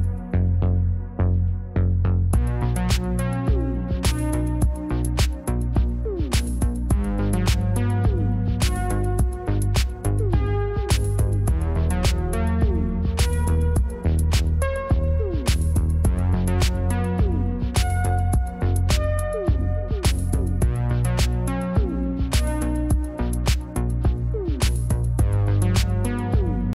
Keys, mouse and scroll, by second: 0.4 click, 2.0-2.7 scroll up 1, 2.7 middle click, 3.2 right click, 3.8 scroll up 1, 10.6 right click, 15.7 space, 18.4 shift+0, 19.7 click, 25.9 click.